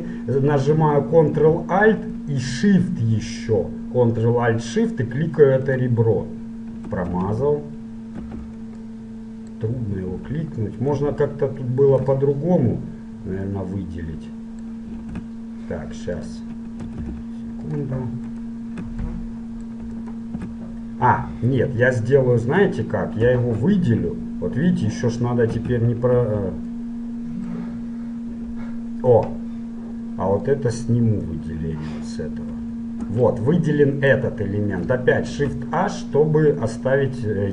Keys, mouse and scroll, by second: 5.7-7.7 right drag, 8.3 ctrl+z, 9.0-10.8 middle drag, 11.0-12.3 right drag, 12.3-14.1 middle drag, 15.3 ctrl+Tab, 17.1 ctrl+Tab, 18.4 right click, 19.2 middle click, 21.0-23.3 middle drag, 23.3 l, 25.6 a, 26.2 l, 26.9 middle click, 28.4 l, 32.7 shift+l, 33.6 middle click, 33.8 middle click, 35.4 shift+h, 36.8 middle click, 37.0 middle click, 37.2 middle click.